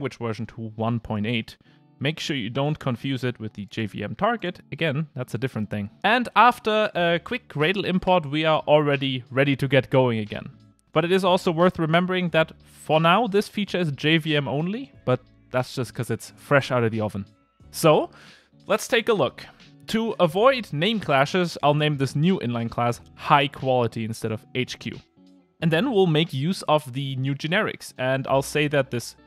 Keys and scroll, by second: 20.3 Return.